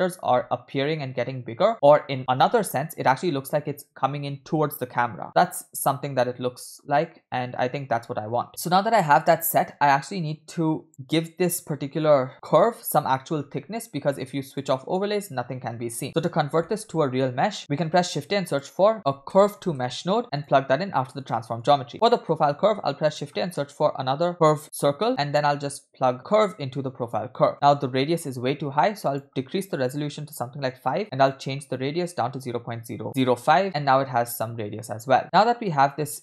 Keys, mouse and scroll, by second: 8.5 space, 9.4-10.9 drag, 10.9 space, 12.3 space, 13.3 space, 14.6 click, 16.0 click, 16.7 middle click, 16.9-17.5 scroll up 3, 17.6 middle click, 17.6 click, 17.7 shift+a, 21.6 click, 22.1 middle click, 22.4 shift+a, 26.4-27.3 drag, 27.5-28.2 scroll up 1, 28.2-28.9 scroll up 3, 29.1-30.7 drag, 31.3-33.5 drag, 32.5 0, 33.6 space, 35.6-36.2 scroll down 1.